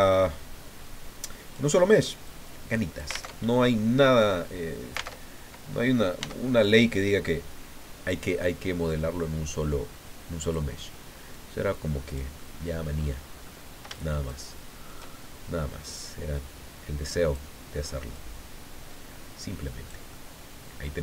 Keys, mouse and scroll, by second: 0.0-1.7 drag, 2.3-3.3 drag, 3.3 alt+Tab, 5.1 alt+Tab, 6.2 s, 10.4 click, 11.3-12.3 drag, 12.3 middle click, 13.3-13.7 scroll up 2, 13.9-15.0 shift+drag, 15.8-17.5 drag, 18.1-21.0 drag.